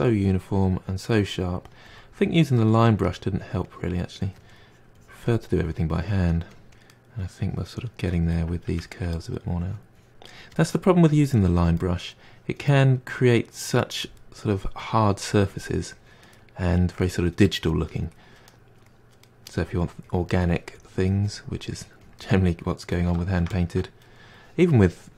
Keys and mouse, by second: 2.4-3.1 middle drag, 3.1-4.4 drag, 4.4 middle click, 4.7-6.8 drag, 6.8-7.4 middle drag, 7.4-7.9 drag, 7.9-8.6 shift+middle drag, 8.6-9.6 drag, 9.6-9.9 middle drag, 9.9-10.6 drag, 10.6 middle drag, 10.9 drag, 11.1-11.5 middle drag, 11.5 click, 11.8-12.1 middle drag, 12.1-12.5 drag, 12.6-13.2 drag, 13.2-13.5 middle drag, 13.5 click, 13.8 middle drag, 14.0 click, 14.4-15.1 middle drag, 15.1-16.5 drag, 16.5-17.6 middle drag, 17.6-18.3 drag, 18.3-18.8 middle drag, 18.8-19.3 drag, 19.3 middle drag, 19.5-20.2 drag, 20.2-22.3 middle drag, 22.3 drag, 22.6-24.2 middle drag, 24.2-24.9 drag, 24.9-25.1 middle drag.